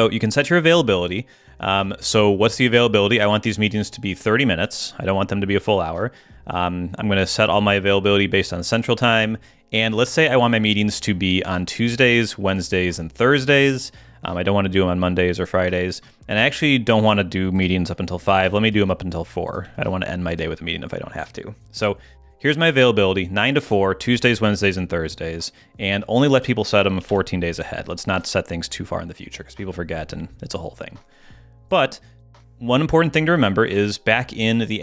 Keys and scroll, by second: 18.3 Down.